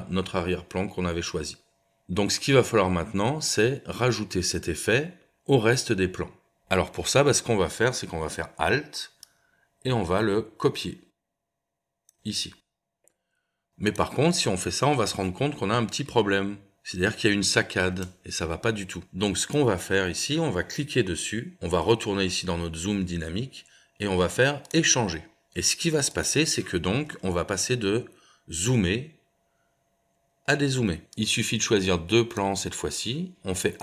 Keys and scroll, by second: 2.0 space, 15.0 space, 18.0 space, 27.1 space.